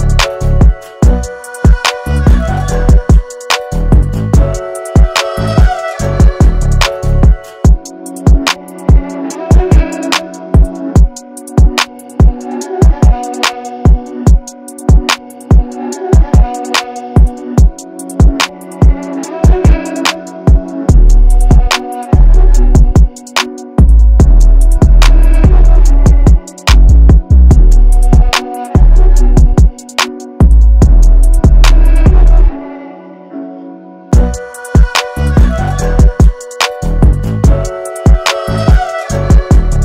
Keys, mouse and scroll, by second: 8.7 alt+scroll down 1, 9.1 space, 9.2 click, 10.0 alt+scroll down 1, 10.2 space, 10.3 click, 10.7 space, 11.9 space, 12.0 click, 15.3 ctrl+j, 16.6-17.0 alt+scroll down 1, 17.6 alt+scroll down 1, 17.9 space, 18.0 click, 18.8-21.3 ctrl+drag, 21.3-21.7 alt+scroll up 2, 21.7 space, 21.8 click, 22.5 alt+scroll up 1, 23.7 right click, 25.4 click, 26.2 right click, 27.8 click, 30.6 alt+scroll down 1, 31.0 space, 31.1 click, 31.2 click, 31.5 space, 33.3-39.7 drag.